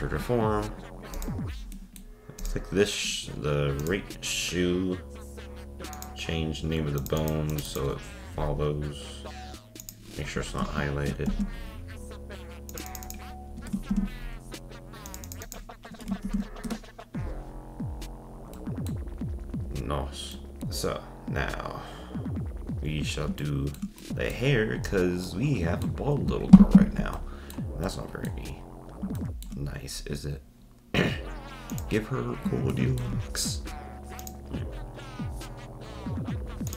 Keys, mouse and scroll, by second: 1.1 click, 1.7-2.4 middle drag, 2.4-2.7 drag, 3.8 drag, 5.9 click, 7.0 click, 7.2-10.3 drag, 12.9-15.1 drag, 15.3-17.9 drag, 17.9 scroll down 2, 18.5-19.2 middle drag, 19.2-19.9 scroll up 4, 19.9-20.3 scroll down 2, 20.3-22.6 shift+middle drag, 22.8-23.4 scroll down 5, 23.4-24.5 shift+middle drag, 24.5-25.3 scroll up 4, 25.3-25.9 middle drag, 25.9-27.2 scroll up 1, 27.2-28.5 middle drag, 28.5-29.2 scroll down 1, 29.2-29.7 shift+middle drag, 29.7-30.2 scroll up 1, 30.2-31.7 scroll up 1, 31.7 click, 32.2-32.7 scroll down 1, 32.7-34.2 shift+middle drag, 34.2-36.7 drag.